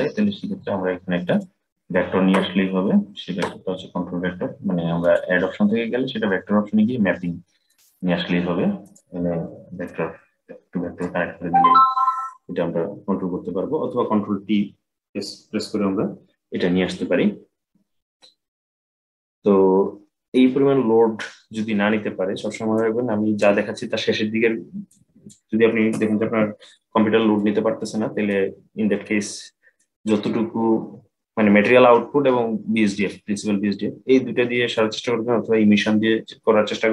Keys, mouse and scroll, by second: 1.0 click, 4.7-7.8 drag, 9.6-12.7 drag, 20.4-22.5 scroll down 7, 22.5-24.8 drag, 26.0 Delete, 27.1-32.2 middle drag.